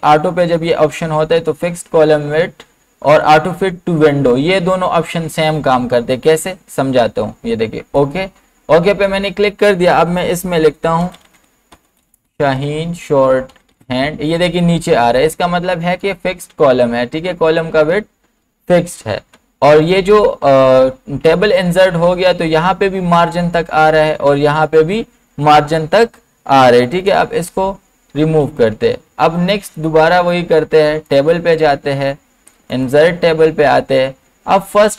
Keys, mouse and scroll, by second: 8.0 BackSpace, 8.0 click, 10.8-14.2 typing, 11.0 click, 15.9 typing, 18.4 typing, 18.9 ctrl+z, 26.7 ctrl+z, 28.3 ctrl+z, 29.7 click.